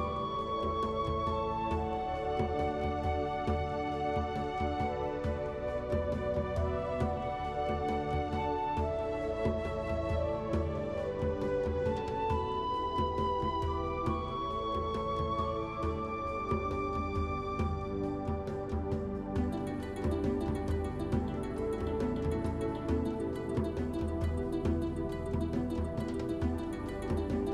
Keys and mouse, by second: 4.0 click, 5.4 alt+shift+click, 6.2 alt+shift+click, 7.5 alt+shift+click, 8.2 click, 8.2 middle click, 9.2 shift+click, 9.5 click, 9.5 middle click, 10.3 middle click, 11.2 shift+middle click, 12.2 middle click, 19.6 click, 20.0 shift+click, 21.8-22.8 drag, 26.1 shift+middle click.